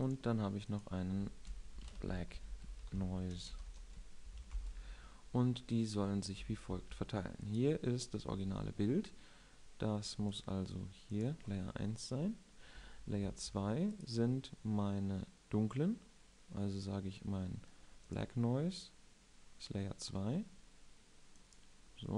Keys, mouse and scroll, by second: 7.6 1, 8.3-10.1 right drag, 10.2-13.9 right drag, 14.1 2, 14.8-22.1 right drag.